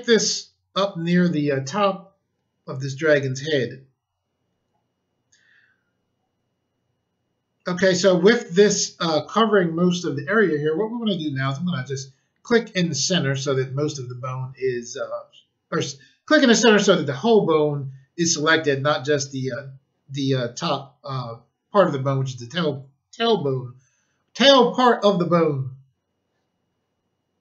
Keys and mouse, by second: 11.4 click.